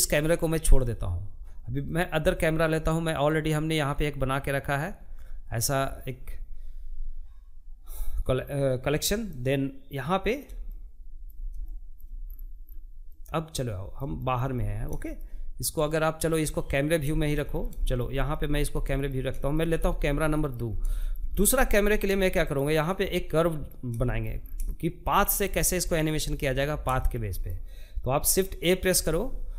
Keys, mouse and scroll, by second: 7.7-10.7 middle drag, 10.7 scroll down 4, 10.9 scroll up 1, 11.0 scroll down 1, 11.5-15.4 middle drag, 15.4 scroll down 1, 15.6-18.1 shift+middle drag, 18.1-18.7 scroll up 4, 18.7 shift+middle click, 19.1-19.4 scroll up 1, 19.4 shift+middle click, 19.7 scroll down 2, 20.0 shift+middle click, 20.9-21.9 shift+right drag, 21.9 middle click, 22.8 scroll down 1, 23.1 shift+middle click, 23.5-23.9 scroll up 2, 23.9-29.5 shift+middle drag.